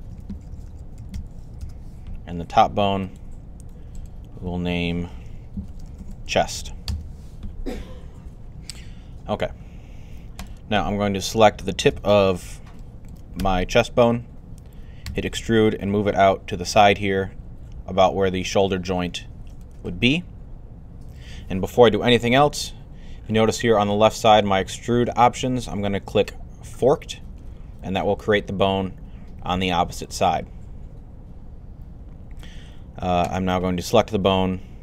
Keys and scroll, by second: 0.0-1.5 typing, 5.3-6.9 typing, 14.9 e.